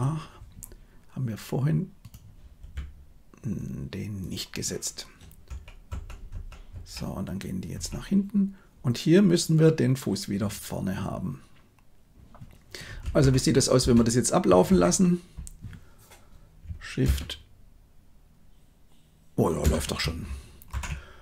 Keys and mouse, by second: 1.9 click, 2.5 r, 5.4 Right, 5.8 Right, 6.2 Right, 6.6 Right, 7.7 Right, 13.1 shift+Left, 13.8 space, 16.9 space, 19.5 shift+space, 20.6 shift+Left.